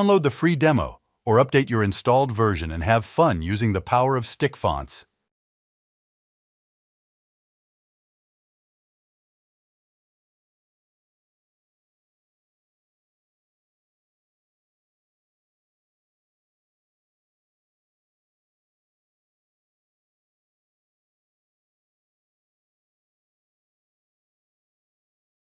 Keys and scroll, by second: 24.5 Escape.